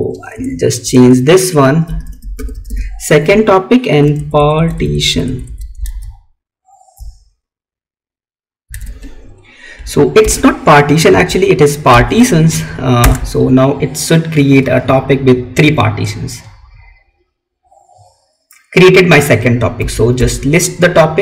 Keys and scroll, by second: 3.4 Right, 5.9 alt+Tab, 8.7 Tab, 10.2 Right, 20.1 Up.